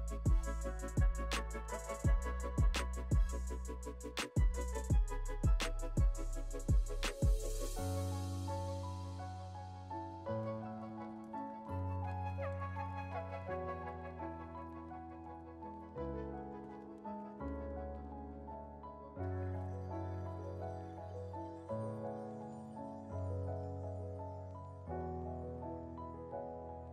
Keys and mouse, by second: 4.1 middle click, 4.1 right click, 6.7 middle click, 6.7 right click, 11.1 middle click, 11.1 right click, 12.9 middle click, 12.9 right click, 18.7 middle click, 18.7 right click, 21.8 middle click, 21.8 right click, 24.5 middle click, 24.5 right click, 26.6 middle click, 26.6 right click.